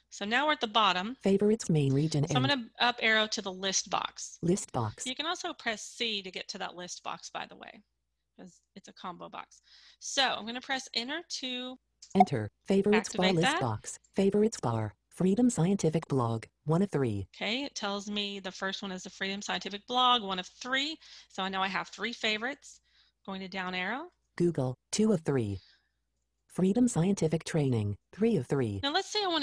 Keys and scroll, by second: 5.5 c, 10.2 Return.